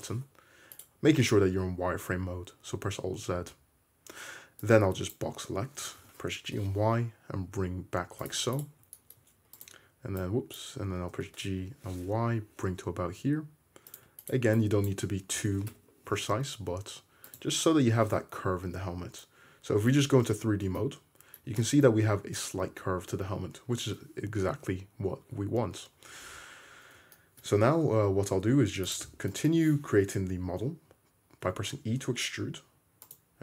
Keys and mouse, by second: 0.8 middle click, 0.8 right click, 1.3 alt+z, 6.0 g, 8.3 shift+middle click, 8.6 click, 8.6-10.3 shift+middle drag, 10.3-14.0 drag, 11.2 g, 14.0 shift+middle click, 14.2 click, 14.3 middle click, 14.7-17.6 drag, 15.5 g, 17.6-18.5 middle drag, 17.8 Tab, 20.0 alt+z, 24.7 `, 25.2 `, 26.0 Tab, 27.7 `, 28.6 2, 29.5-33.4 shift+middle drag, 31.5 e.